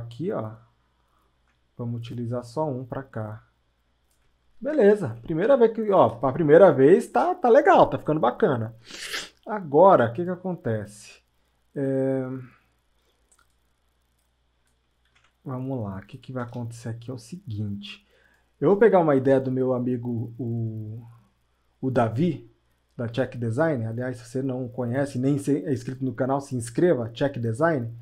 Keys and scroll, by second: 6.1 ctrl+alt+space, 15.1 ctrl+z.